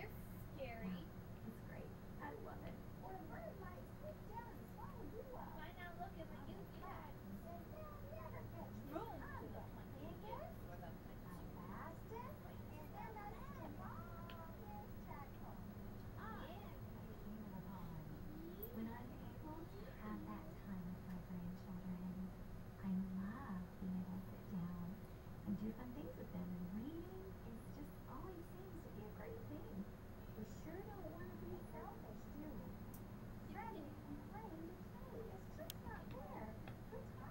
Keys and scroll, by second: 25.3 BackSpace, 27.4 Up, 28.8 shift+Up.